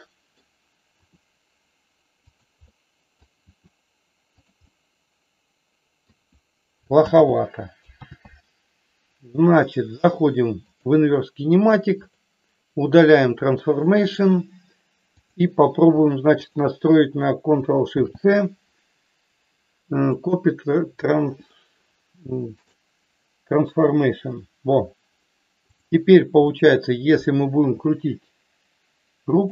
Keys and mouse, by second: 1.0 r, 2.2 click, 2.7 middle click, 3.5 r, 4.3 click, 4.6-6.1 middle drag, 7.1 ctrl+z, 8.1 ctrl+z, 9.5 middle click, 10.6 click, 14.1 click, 15.1 click, 16.5 shift+click, 21.5-22.6 middle drag, 25.7 click, 26.3 middle click, 27.6 r, 29.3 click.